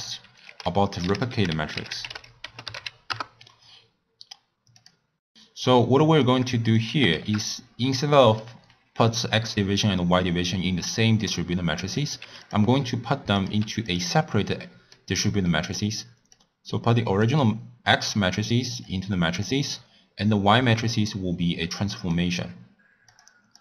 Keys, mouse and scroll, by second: 0.4 ctrl+a, 5.1 click, 5.6 click, 6.7 click, 7.3 shift+d, 8.1 middle click, 8.5-11.6 scroll up 1, 12.0 click, 13.3 click, 14.5-16.3 middle drag, 16.3 click, 18.8 click, 20.8 drag, 23.3 click.